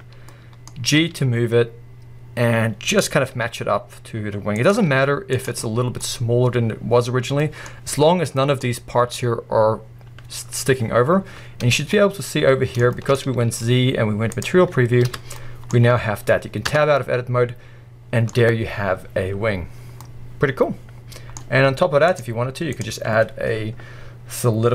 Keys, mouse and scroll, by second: 1.0 g, 3.4 s, 4.7 click, 4.8 g, 8.3-11.2 right drag, 11.2-14.5 middle drag, 11.2-11.9 scroll up 1, 14.5 z, 15.1 alt+a, 15.4-16.7 middle drag, 16.7 Tab, 17.0-18.3 middle drag, 18.3-20.0 scroll up 1, 20.0 scroll up 1, 20.0-24.7 middle drag.